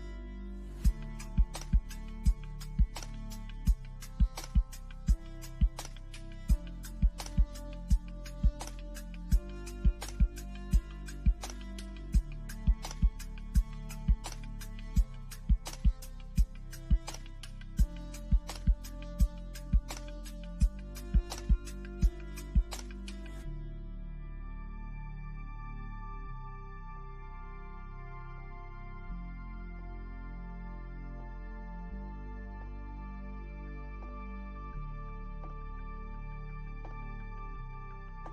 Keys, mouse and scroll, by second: 3.1-3.7 scroll up 1, 5.1 middle click, 6.0-6.6 scroll down 1, 9.4 scroll up 1, 10.2 click, 12.6 scroll up 1, 14.7 shift+middle click, 16.9 click, 19.1 click, 31.0 click, 38.2 scroll down 1.